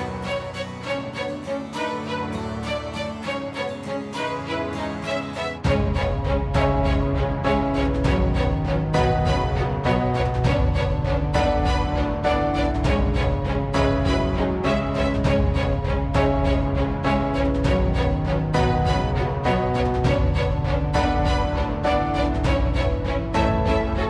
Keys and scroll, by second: 0.0 /, 13.6 ctrl+r.